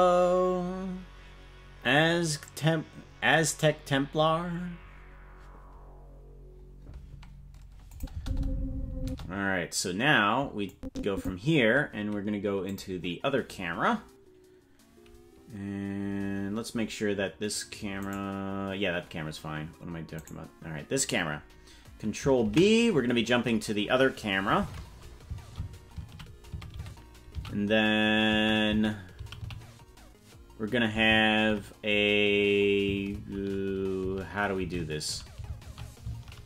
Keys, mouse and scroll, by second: 7.9 click, 8.1 space, 9.0 space, 10.7 click, 12.7 click, 18.1-22.2 right drag, 22.5 ctrl+b, 24.6 shift+`.